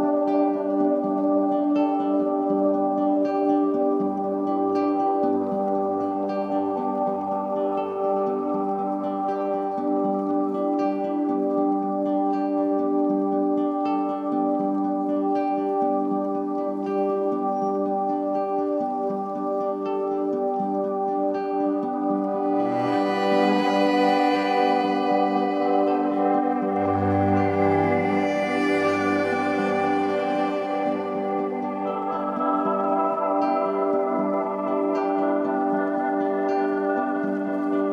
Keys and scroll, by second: 14.8-16.7 typing, 19.6 super+d, 20.9 super+d, 23.6 v, 26.7 BackSpace.